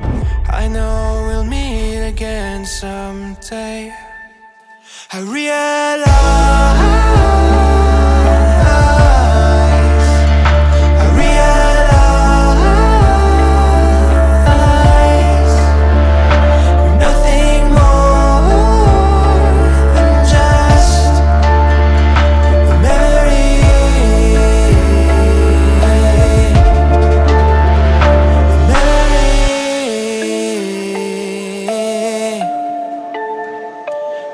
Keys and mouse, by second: 0.6 shift+click, 1.9 shift+click, 3.1 middle click, 4.3 ctrl+middle click, 4.6 shift+middle click, 5.0 ctrl+middle click, 7.0 ctrl+click, 8.4 ctrl+click, 9.7 ctrl+click, 10.3 middle click, 13.0-16.3 drag, 20.3 right click, 20.6 middle click, 21.6 shift+middle click, 22.0 ctrl+middle click, 22.3 middle click, 23.0 Tab, 23.3 middle click, 24.3 ctrl+middle click, 25.1 ctrl+middle click, 25.7 middle click, 26.1 middle click, 26.4 shift+a, 29.4 click, 30.2 click.